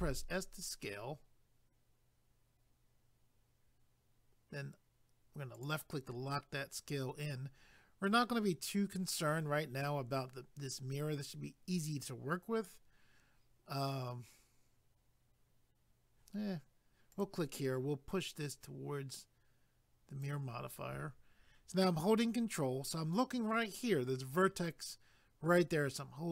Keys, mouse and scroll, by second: 5.5 click, 17.1 click, 18.5 click.